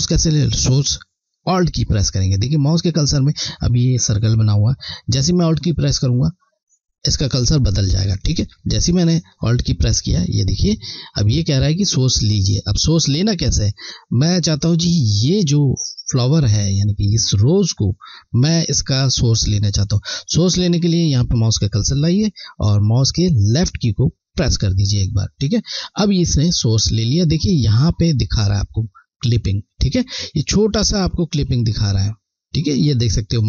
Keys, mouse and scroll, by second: 24.3 alt+click.